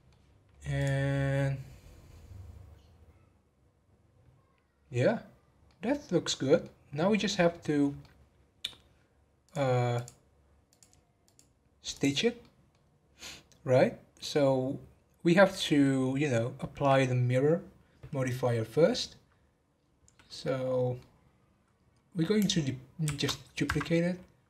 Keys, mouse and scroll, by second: 5.2 scroll down 1, 5.6-9.4 middle drag, 9.4-11.3 drag, 11.9 click, 12.4 middle click, 12.8 scroll down 1, 14.2-17.3 middle drag, 19.8 scroll up 3, 20.2-23.0 middle drag, 23.0 shift+d.